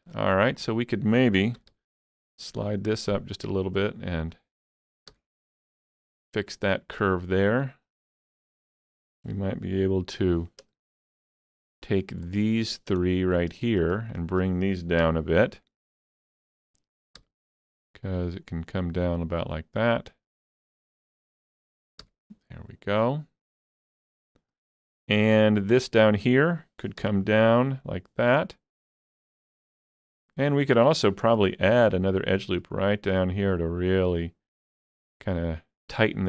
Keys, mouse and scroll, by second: 0.5 click, 1.6 g, 1.7 g, 4.2 click, 5.1 g, 5.7 click, 7.5 click, 7.9 scroll up 2, 8.1 shift+middle click, 11.2 shift+middle click, 11.2 scroll up 1, 11.4 shift+click, 11.8 shift+middle click, 13.1-15.0 middle drag, 14.1 shift+click, 15.0 KP_3, 17.2 g, 21.2 click, 22.0 g, 23.8 click, 24.8-29.3 shift+middle drag, 25.9 click, 27.0 g, 29.3 click, 29.5 scroll down 1, 29.8 shift+middle click, 31.3 ctrl+r, 31.9 click.